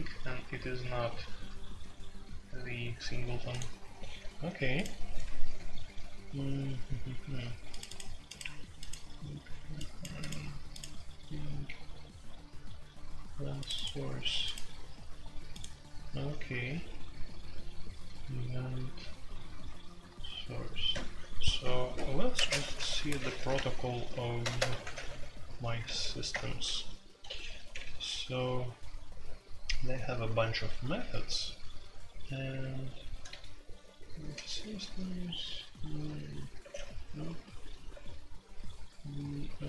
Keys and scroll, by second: 22.3-25.8 typing, 26.3 Return, 27.7 ctrl+u, 27.9 ctrl+u, 28.2-29.6 typing, 31.0 ctrl+u, 33.0-34.4 typing, 34.4 ctrl+u, 35.4 ctrl+u, 36.0 ctrl+u, 36.6 ctrl+d, 36.7 ctrl+d, 37.9 ctrl+d, 39.5 ctrl+d.